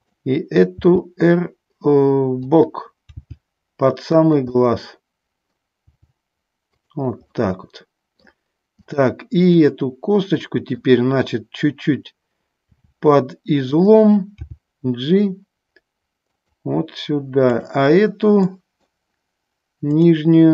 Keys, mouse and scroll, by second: 0.2 click, 1.0 r, 2.5 click, 3.4 g, 4.4 click, 4.7-5.8 middle drag, 6.2 g, 7.6 middle click, 9.1 click, 9.8-11.1 middle drag, 13.0 r, 14.6 g, 17.7 click, 18.7 middle click.